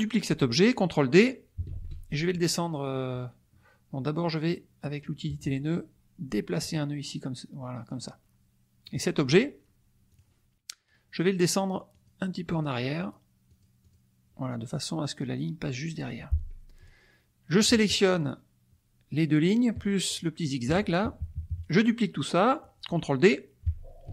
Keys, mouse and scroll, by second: 1.7 ctrl+d, 5.2 click, 6.6-8.0 drag, 8.8 click, 10.0 click, 11.9 click, 12.5 click, 13.0 click, 13.4 click, 18.2 shift+click, 20.0 shift+click, 21.2 KP_Subtract, 22.1-23.1 drag, 24.0 ctrl+d.